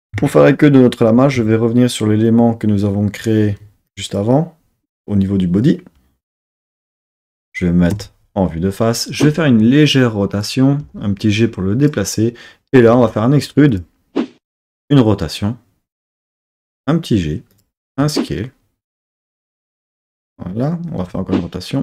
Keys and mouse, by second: 3.5 3, 3.9 click, 7.9 KP_3, 9.1 r, 10.3 click, 10.8 g, 11.8 click, 12.9 e, 13.7 click, 14.6 r, 16.2 click, 16.6 g, 17.5 click, 17.9 s, 18.9 click, 19.3 g, 20.2 click, 21.0 r.